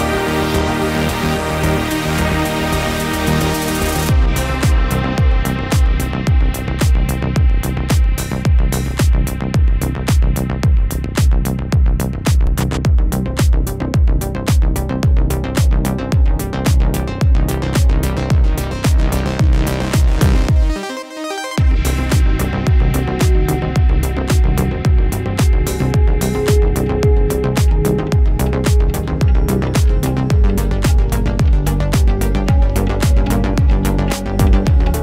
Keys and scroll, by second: 34.9 shift+super+Return.